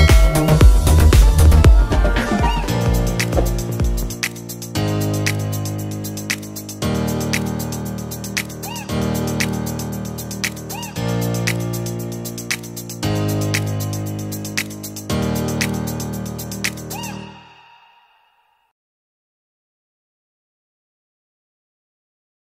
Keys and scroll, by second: 14.8 Return, 16.2 F7, 18.3 v.